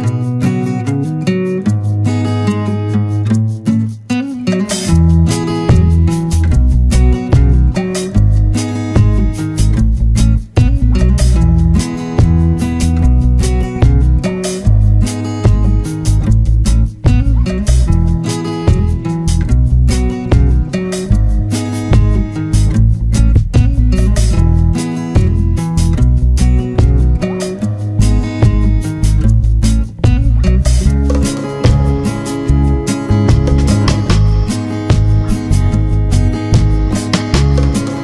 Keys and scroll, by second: 4.3 ctrl+-, 5.0 ctrl+0, 6.2 ctrl+space, 6.9 ctrl+=, 13.3 ctrl+z, 19.4 ctrl+z, 25.7 ctrl+=, 25.8 ctrl+space.